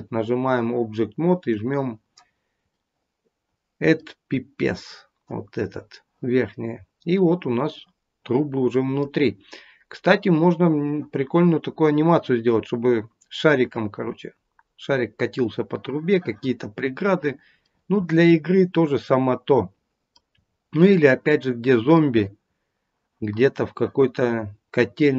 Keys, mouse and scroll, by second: 1.7 click, 2.7 middle click, 4.7-5.7 scroll up 3, 6.6-7.7 scroll down 2, 7.1 middle click, 9.3-10.1 scroll up 3, 16.8-17.5 scroll down 1, 17.5 middle click, 17.5-20.1 scroll down 2, 20.3-20.9 scroll up 5, 20.9 middle click, 22.3-23.5 scroll down 1, 23.5-23.9 scroll down 1, 24.2-25.0 scroll down 1, 25.0 middle click, 25.0-25.1 scroll down 2.